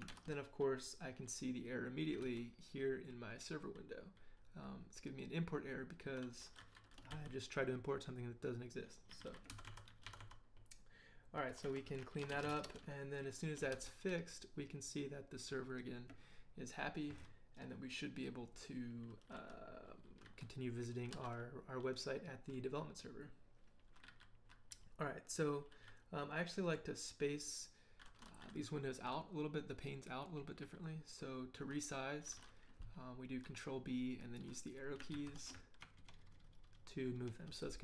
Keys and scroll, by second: 0.1 ctrl+l, 2.2 ctrl+k, 7.1 ctrl+h, 8.9-12.9 typing, 13.0 Return, 13.7 ctrl+l, 35.1 ctrl+b, 36.0 ctrl+Right.